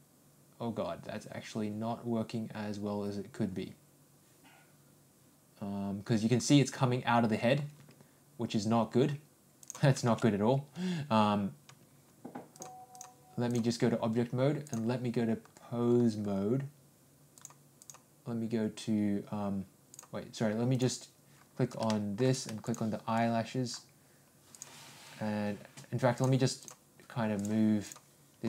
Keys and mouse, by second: 12.5 ctrl+click, 14.6-17.5 drag, 17.7-19.7 drag, 21.9-22.2 shift+middle drag, 22.6 shift+click, 24.5 click, 26.2 click.